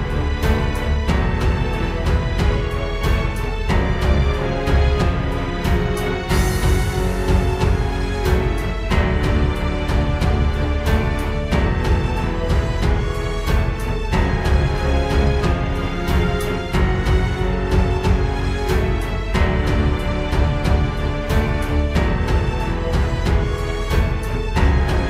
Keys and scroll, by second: 0.8 ctrl+space, 1.2 ctrl+space, 3.4 ctrl+space, 4.4 ctrl+j, 5.5 ctrl+space, 6.0 ctrl+space, 9.1 ctrl+d, 17.7 ctrl+space.